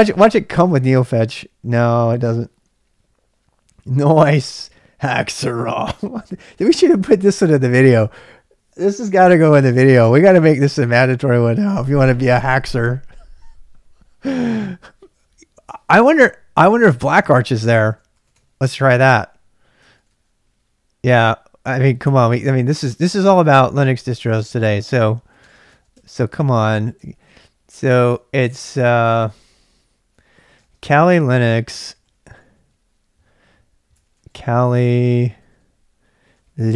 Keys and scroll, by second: 0.0-1.0 typing, 2.5-3.3 typing, 9.0 typing, 17.6-18.9 typing, 19.8 ctrl+[, 19.9 k, 20.1 k, 21.3-25.8 typing, 25.9 Tab, 26.3 Return, 27.0 ctrl+[, 27.1-36.7 typing.